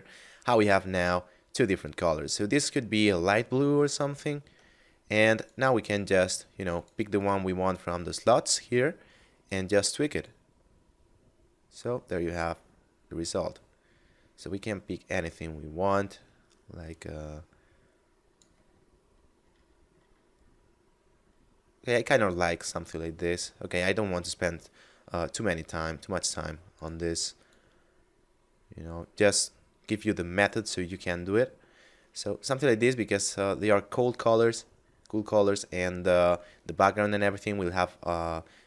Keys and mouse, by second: 4.3 Tab, 5.2 click, 8.0 middle click, 9.4 click, 18.7 middle click, 26.7 click, 35.2 middle click.